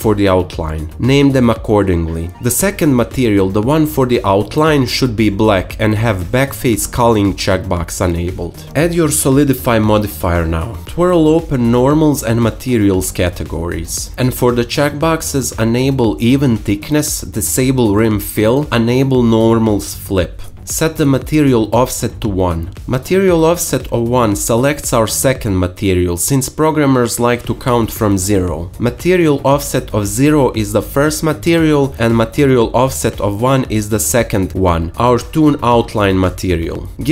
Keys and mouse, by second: 2.6-8.5 drag, 9.0-16.6 drag, 18.1 click, 19.9-27.5 drag.